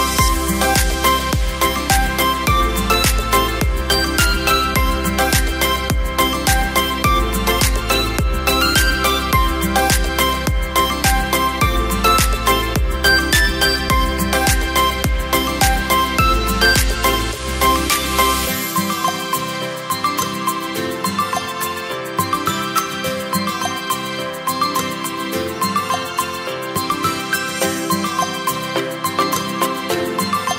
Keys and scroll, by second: 2.9 Caps_Lock, 3.4 ], 5.7 ], 7.6 v.